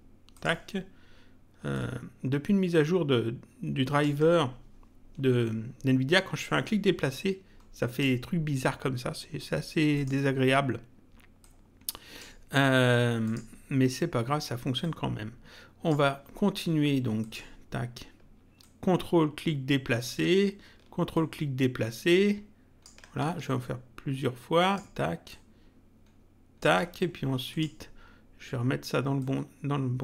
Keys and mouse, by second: 0.3 click, 1.7 ctrl+click, 6.4 click, 9.9 click, 11.4 click, 13.2 click, 14.8 click, 17.2 click, 18.6 ctrl+click, 21.1 ctrl+click, 23.6 ctrl+click, 25.2 ctrl+click, 27.4 click, 29.2 click.